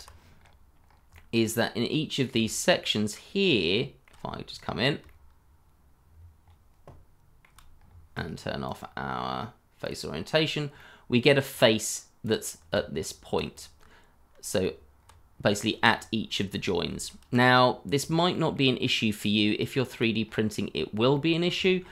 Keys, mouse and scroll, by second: 0.4 scroll up 1, 1.1 middle click, 2.4 shift+middle click, 4.1 middle click, 4.1 shift+scroll up 2, 4.5 middle click, 5.0 shift+middle click, 7.7 shift+middle click, 7.7 scroll up 1, 10.1 scroll up 1, 10.7 middle click, 12.7 Tab, 14.1 Tab, 14.1-14.6 scroll down 1, 14.6 Tab, 15.3 scroll down 1, 15.9 middle click, 16.5 scroll down 1, 17.0 shift+middle click, 17.8 scroll up 1, 18.3 middle click, 20.2 scroll up 1, 20.8 scroll down 1, 21.1 middle click, 21.6 shift+middle click.